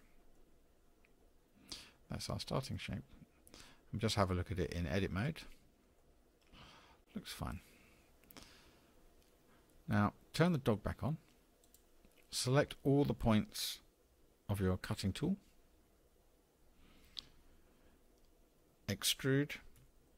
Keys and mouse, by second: 0.4-2.7 middle drag, 5.2 Tab, 6.0-7.5 middle drag, 11.6 click, 16.0 a, 19.8 e.